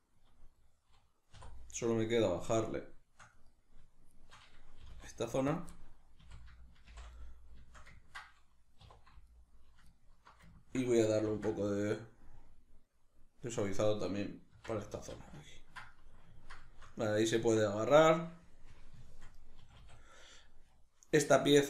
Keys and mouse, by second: 0.3-1.3 middle drag, 1.3 3, 1.9 right click, 2.7 shift+right click, 3.3 right click, 4.1 shift+right click, 4.9 g, 5.6 click, 5.7-9.3 middle drag, 6.2 a, 6.9 shift+n, 8.9 2, 9.3 alt+right click, 9.9 alt+shift+right click, 10.5 ctrl+middle click, 11.3 ctrl+b, 13.9 click, 14.5 Tab, 15.5-20.6 ctrl+middle drag, 19.6 a, 20.6 right click, 21.3 Tab.